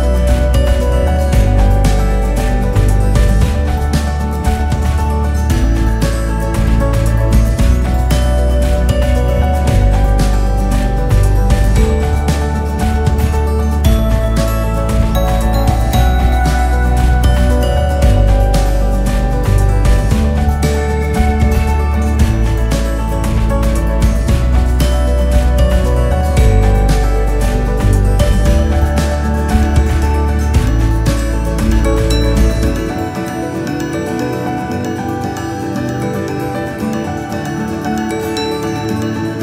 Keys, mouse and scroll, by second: 0.0-1.5 drag, 1.5 f, 2.5-3.9 drag, 4.5 f, 4.7 click, 5.5-8.6 typing, 9.5-10.8 drag, 10.8 s, 12.5 click, 13.1 KP_2, 13.7 KP_8, 14.4 click, 15.2 x, 17.0 s, 19.0 click, 19.4-24.0 typing, 24.7 Tab, 25.2-25.8 drag, 25.8 KP_1, 26.7 KP_8, 27.4 click, 28.1 scroll up 5, 28.3 scroll down 3, 28.9-31.8 drag, 33.9-34.3 KP_6, 36.5 s, 38.2-39.4 KP_6.